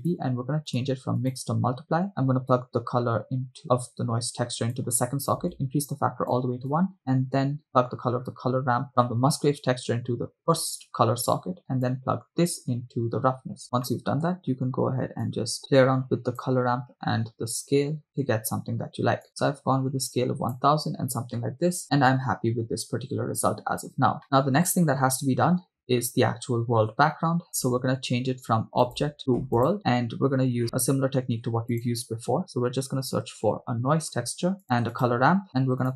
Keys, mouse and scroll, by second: 1.4 click, 2.7-5.0 drag, 5.7 click, 7.0 click, 8.9-10.6 drag, 11.9-13.6 drag, 13.9 middle click, 15.6-16.6 drag, 19.3 0, 19.3-20.9 drag, 23.0-23.6 scroll down 1, 23.6-24.0 scroll down 2, 27.5 scroll down 5, 29.7 click, 29.8 middle click, 30.1-30.6 scroll up 4, 30.6 middle click, 31.1 scroll up 1, 31.3 shift+a, 35.0 shift+a.